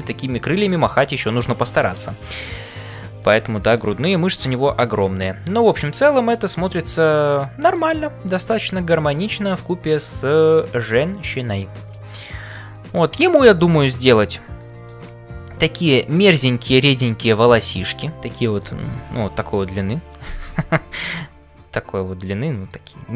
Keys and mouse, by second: 3.2 middle click, 6.4-7.7 middle drag, 11.7 middle click, 12.9 middle click, 14.5 middle click.